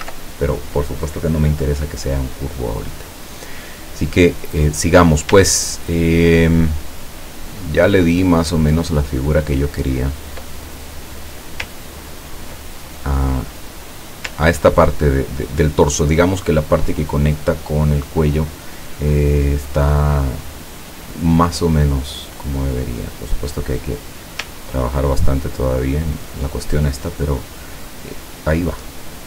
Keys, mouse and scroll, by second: 5.6 ctrl+click, 7.6 ctrl+scroll down 2, 8.3 ctrl+scroll down 2, 9.0 ctrl+click, 10.0-10.3 ctrl+scroll down 1, 10.7 ctrl+click, 10.8 ctrl+middle click, 12.2 ctrl+scroll down 2, 12.7 ctrl+scroll down 2, 12.9 ctrl+middle click, 22.6 click, 24.1-26.6 drag.